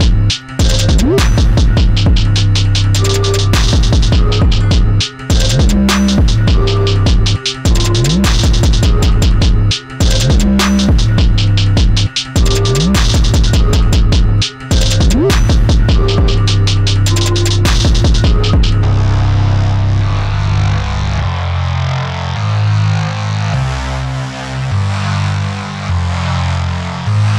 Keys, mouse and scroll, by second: 2.4 ctrl+z, 6.8-15.7 drag, 15.7-25.7 alt+drag.